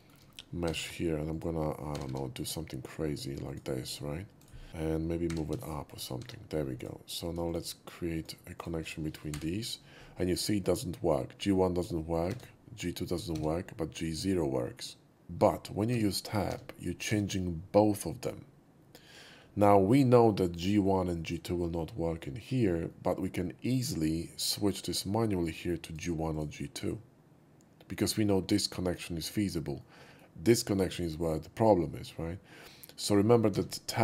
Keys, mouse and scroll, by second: 0.6 g, 0.7 g, 1.3 click, 1.9 r, 2.0 r, 3.4 click, 4.4 right click, 4.7-6.7 typing, 5.8 click, 5.9 right click, 6.7 click, 7.4 shift+click, 8.1 shift+click, 8.5 shift+click, 9.2 l, 12.2 Tab, 16.7 Tab, 20.4 middle click, 22.8 middle click, 25.8 click, 26.3 click, 29.8 middle click, 33.5 Tab.